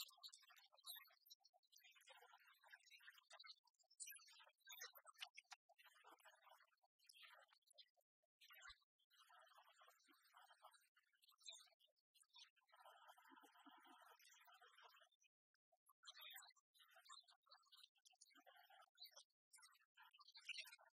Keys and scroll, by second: 19.2 BackSpace.